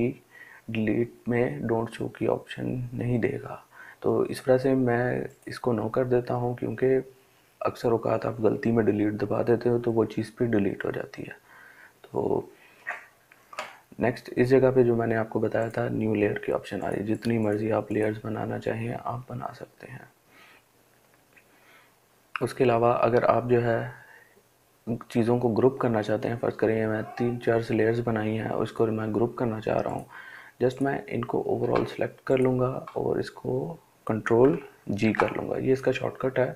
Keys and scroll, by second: 34.3 ctrl+g.